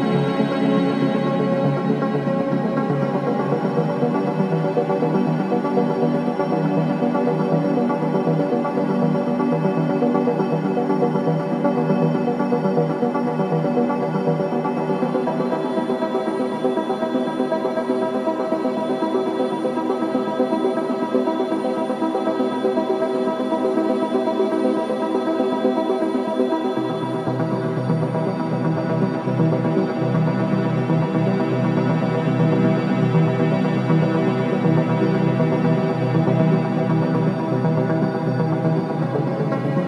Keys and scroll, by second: 3.2 4, 4.0 3, 6.9 ], 8.7 ], 9.7 ], 10.3 ], 12.2 4, 19.4 2, 25.4 4, 27.2 3, 27.6 ], 28.7 4, 36.6 ,, 37.7 3, 38.7 ].